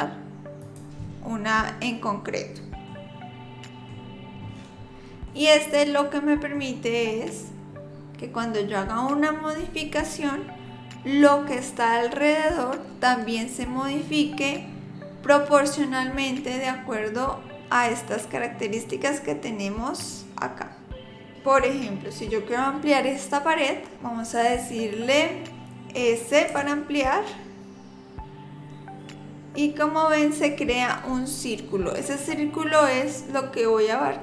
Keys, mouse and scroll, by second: 2.9 middle click, 4.0 scroll up 4, 4.3-5.3 scroll down 12, 5.3 middle click, 20.1 click, 26.5 s.